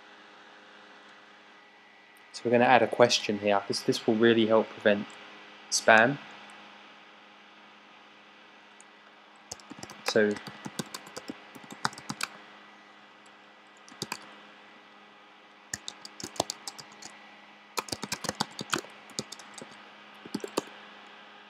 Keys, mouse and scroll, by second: 9.6-12.2 typing, 13.6-14.5 typing, 15.8-20.3 typing, 20.5 Return.